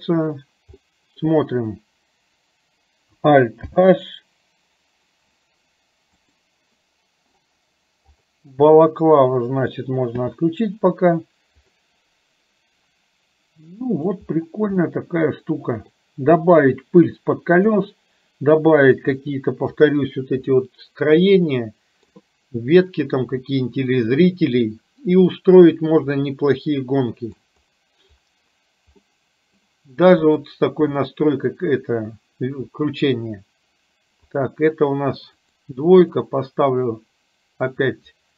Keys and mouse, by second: 0.8 middle click, 4.9 alt+h, 6.3 click, 11.8-14.1 middle drag, 14.9-15.9 middle drag, 19.3 middle click, 20.5-22.1 middle drag, 26.3-27.5 middle drag, 29.0 middle click, 30.3 click, 31.0 middle click, 34.4-38.3 drag.